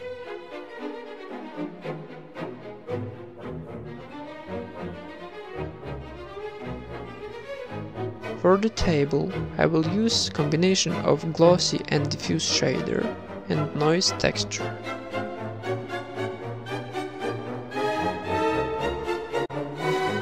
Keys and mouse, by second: 2.2 click, 4.6 click, 8.3 click, 9.0 click, 9.9 KP_0, 10.1 ctrl+v, 10.3 shift+a, 11.0 click, 12.4 click, 13.1 click, 13.5 shift+a, 13.7 click, 14.9 click, 15.1 g, 15.3 g, 15.5 g, 15.8 click, 16.0 middle click, 16.3 click, 16.7 middle click, 16.9 right click, 16.9 g, 17.1 shift+d, 18.7 click, 19.4 click, 19.6 shift+d, 20.1 ctrl+s.